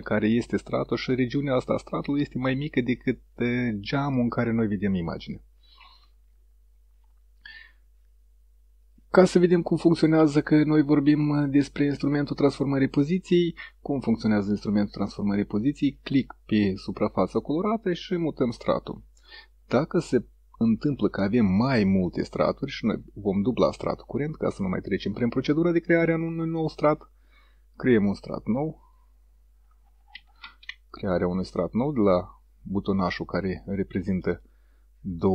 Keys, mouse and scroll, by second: 8.9 click, 14.5-18.8 drag, 26.6 click, 30.5 ctrl+z, 31.3-34.7 drag, 34.3 right click.